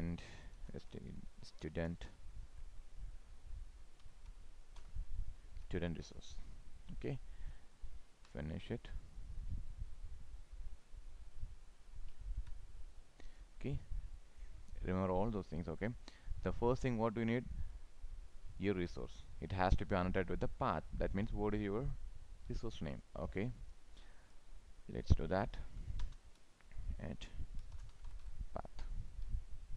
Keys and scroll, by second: 12.3 ctrl+s.